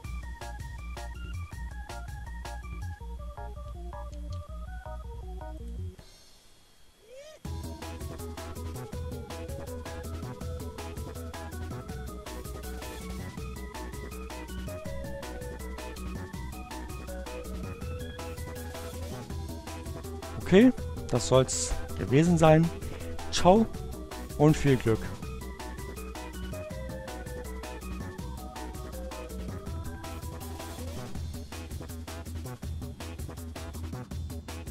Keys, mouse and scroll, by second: 2.5 ctrl+alt+w, 4.0 click, 6.4 click, 7.4 ctrl+alt+w, 14.2 ctrl+alt+w, 17.1-18.2 drag, 18.8 click, 27.4 click.